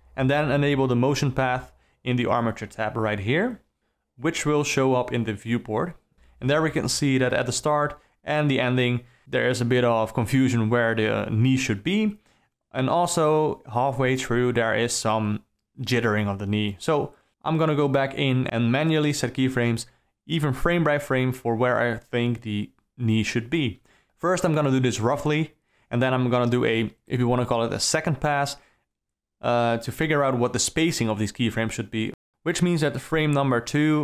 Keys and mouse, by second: 0.2 click, 1.4 click, 1.9 KP_3, 3.0-5.5 drag, 8.8 shift+Left, 10.0 d, 10.4 d, 10.6-10.9 drag, 12.2 Right, 17.6 Up, 17.7 Down, 17.9 Right, 18.0 Right, 18.1 Right, 18.4 Right, 19.4 shift+F12, 19.9 Left, 20.0 Left, 20.1 Left, 20.4 Left, 20.5 Right, 20.8 shift+e, 21.0 g, 21.6 ctrl+space, 21.9 alt+middle click, 22.4 click, 22.8 click, 22.9 click, 23.1 click, 23.3 click, 24.0 click, 24.1 click, 25.5 Right, 26.1 Right, 26.5 g, 26.8 g, 27.4 g, 28.2 q, 29.4 shift+Left, 30.0 shift+Right, 30.2 Left, 30.3 click, 30.6 Left, 30.7 Right, 31.6 g, 32.4 q, 33.1 ctrl+z, 33.2 ctrl+z, 33.7 click.